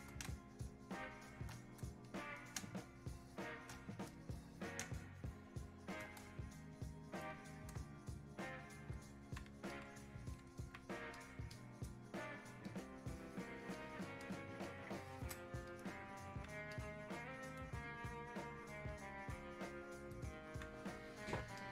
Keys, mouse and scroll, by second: 0.3 space, 0.7 click, 0.8 space, 2.1 click, 2.6 space, 4.2 click, 4.9 space, 5.3 click, 5.4 space, 6.4 shift+click, 8.0-9.7 shift+drag, 9.7-11.2 alt+drag, 11.2 click, 12.7 alt+click, 13.8 click, 14.7 ctrl+shift+click, 15.7 shift+click, 16.7-18.9 alt+drag, 18.9-21.6 drag, 21.6 click.